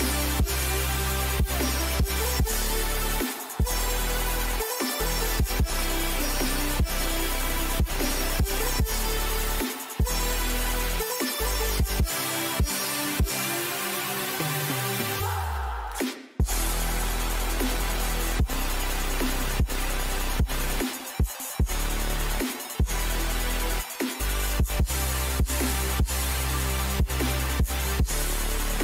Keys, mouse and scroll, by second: 13.3-15.6 drag, 15.0-17.3 right drag, 16.9-18.2 middle drag, 19.8-21.5 right drag, 20.3-21.5 middle drag, 21.5 right click, 21.6 middle click, 22.6-23.7 middle drag, 23.7-25.7 drag, 28.5 ctrl+z.